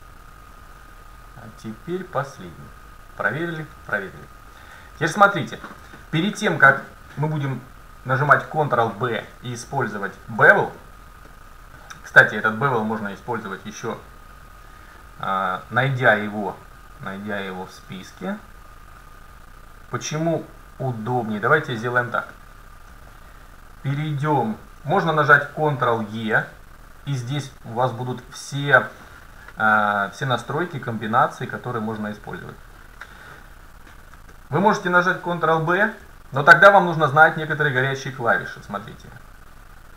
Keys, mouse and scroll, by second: 1.2 middle click, 4.3 middle click, 8.0 middle click, 10.2-10.8 scroll up 1, 10.8 middle click, 13.2-15.1 drag, 22.1-22.4 scroll up 1, 22.4-23.1 scroll down 1, 23.1-25.0 middle drag, 26.2 ctrl+e, 33.5-34.4 scroll up 2, 34.4-37.2 middle drag, 35.8 ctrl+b.